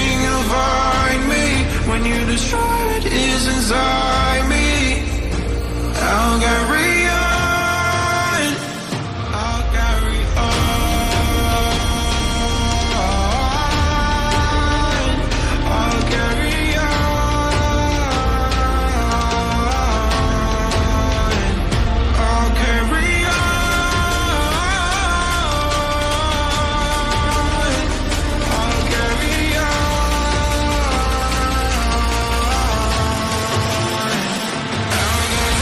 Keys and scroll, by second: 1.5 5, 6.5 5, 6.5 BackSpace, 6.7 4, 8.5 4, 8.7 BackSpace, 9.1 3, 11.1 BackSpace, 11.4 4, 12.2 BackSpace, 12.7 5, 14.3 4, 30.8 g, 31.8 e, 34.1-35.1 typing.